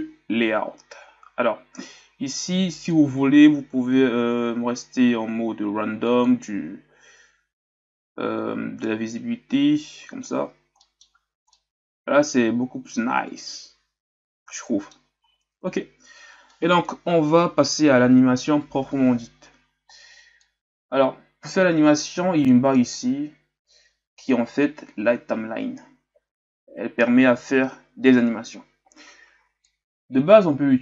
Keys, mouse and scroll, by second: 0.0-1.0 drag, 1.0-2.7 scroll down 1, 2.7-3.7 scroll down 3, 6.1 click, 11.0-11.5 scroll up 3, 11.5-15.0 middle drag, 15.0-15.4 scroll up 1, 15.4-18.7 scroll down 1, 20.5-30.8 drag.